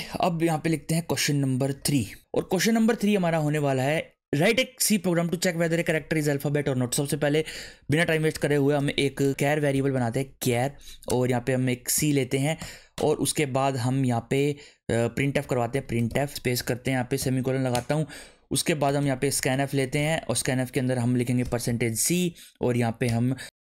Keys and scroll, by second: 1.8 3, 7.5 Return, 8.1-12.6 typing, 12.9 Return, 15.0-17.2 typing, 17.7 Return, 18.6-23.6 typing.